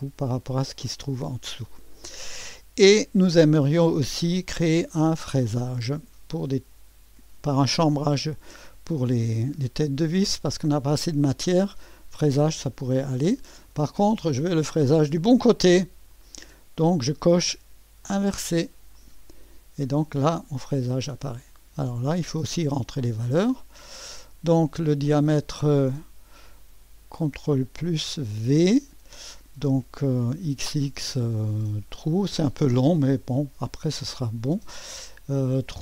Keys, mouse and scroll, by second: 1.6-4.6 scroll down 1, 6.5 click, 8.0-14.7 drag, 16.1 click, 18.0 click, 19.0-20.0 drag, 21.1 right click, 23.4 click, 28.6 ctrl+v, 30.5 typing, 32.7 click.